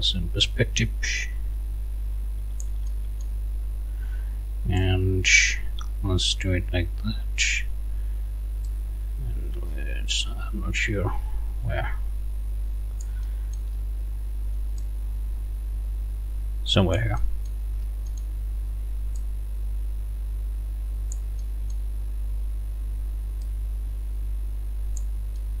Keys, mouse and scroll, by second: 0.5-3.4 drag, 4.8-7.6 drag, 8.7-13.7 drag, 14.8-17.7 drag, 17.7 scroll up 1, 18.0 click, 25.4 click.